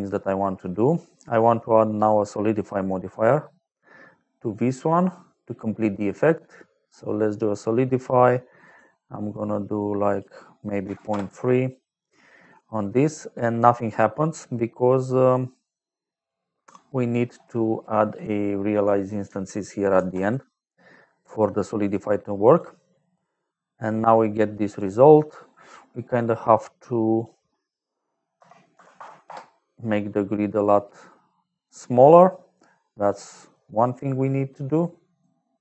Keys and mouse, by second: 0.9 middle click, 1.9 click, 3.1 click, 8.6 click, 9.5 click, 10.8 KP_3, 11.0 Return, 12.4 middle click, 16.1 click, 17.1 middle click, 17.7 click, 18.6 click, 19.9 shift+a, 21.7 click, 22.4 click, 24.1 middle click, 25.0 middle click, 25.9 middle click, 27.1 click, 27.5 click, 28.3 KP_Divide, 28.7 KP_1, 28.9 KP_0, 29.2 Return, 31.1 middle click, 32.2 middle click, 32.7 middle click, 33.2 middle click, 34.2 middle click.